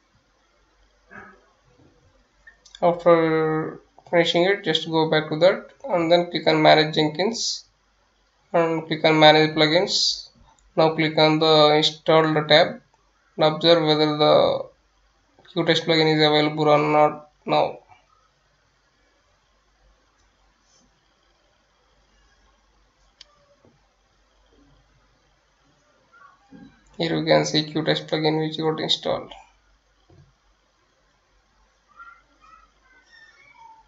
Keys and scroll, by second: 15.6-16.9 typing, 20.9 F9, 22.0-23.4 typing, 24.6 Return, 32.5-33.8 typing.